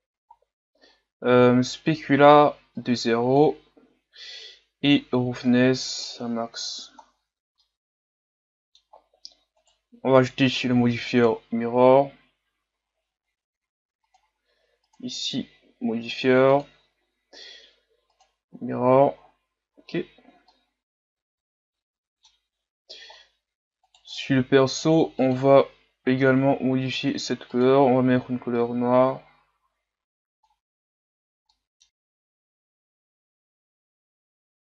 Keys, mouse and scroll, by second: 0.6 scroll down 5, 3.0-6.8 drag, 6.8 a, 7.1-7.8 scroll down 4, 7.8-8.8 middle drag, 8.8-9.5 scroll up 1, 9.5 scroll up 1, 9.7-12.5 right drag, 18.3 click, 19.1 a, 19.2-19.8 scroll down 2, 19.8-20.6 scroll down 5, 20.6-23.0 middle drag, 23.0-24.0 scroll up 5, 24.0-25.4 right drag, 25.4-26.8 drag, 27.0-28.5 drag, 31.5 middle click, 31.9-32.2 scroll up 2, 32.2 click, 33.1-34.6 drag.